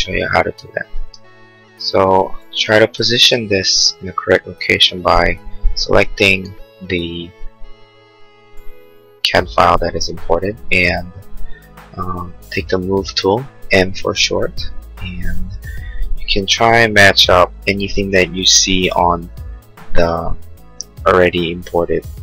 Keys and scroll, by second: 0.7 space, 5.5 space.